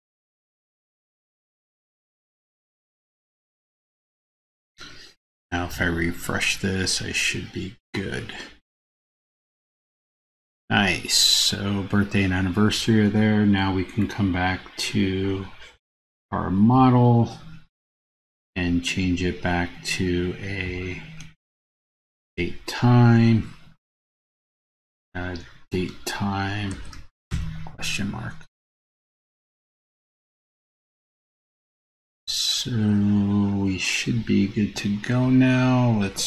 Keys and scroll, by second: 29.7 super+s.